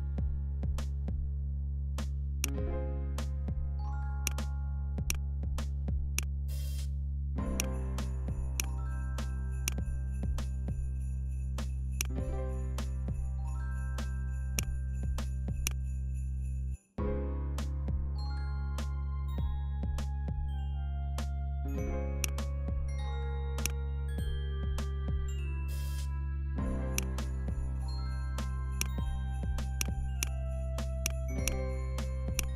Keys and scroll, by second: 0.5 BackSpace, 19.8 Down.